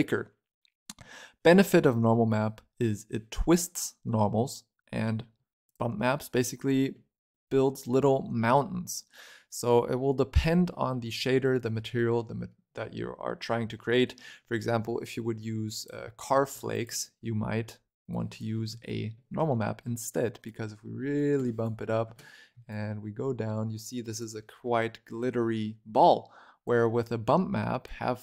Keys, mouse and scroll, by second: 1.3-2.9 scroll up 4, 2.9-3.3 scroll up 2, 3.3-4.7 scroll down 2, 4.7 scroll down 3, 4.8 middle click, 5.2 scroll up 4, 5.5 click, 5.9-9.0 middle drag, 11.5-12.1 scroll down 3, 12.1 middle click, 13.0 scroll down 2, 13.3 scroll up 7, 13.8 middle click, 13.9-14.9 scroll down 1, 14.9 click, 16.3 shift+middle click, 16.6 ctrl+right click, 18.0 click, 18.7-20.3 shift+middle drag, 20.3-24.3 drag, 24.3-25.8 shift+middle drag, 25.8 click, 27.7 click.